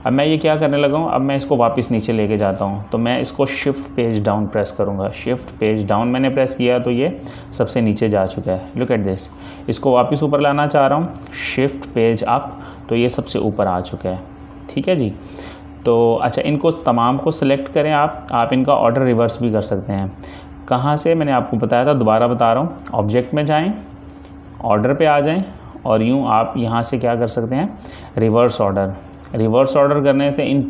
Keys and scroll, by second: 5.4 shift+Page_Down, 12.0 shift+Page_Up.